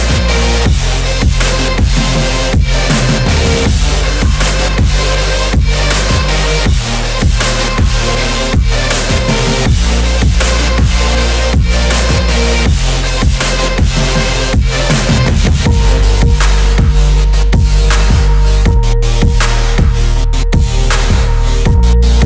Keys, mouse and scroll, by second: 4.6 middle click, 6.3-7.5 middle drag, 8.1-9.5 drag, 8.9 0, 11.1 middle click, 12.6 Tab, 13.1 shift+a, 15.8 middle drag, 18.1 Tab, 20.1-21.2 drag, 21.5-22.2 drag.